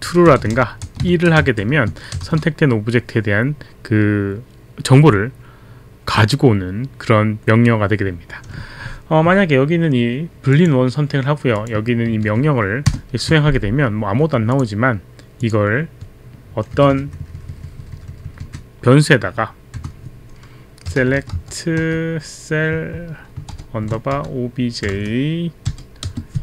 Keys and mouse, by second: 0.0-2.2 typing, 10.5 click, 11.5 click, 12.1 ctrl+a, 12.8 ctrl+Return, 14.5 click, 15.4 click, 16.8 click, 17.1 click, 17.5 click, 18.0 click, 18.3 click, 19.7 click, 20.6-21.9 typing, 24.2-26.1 typing.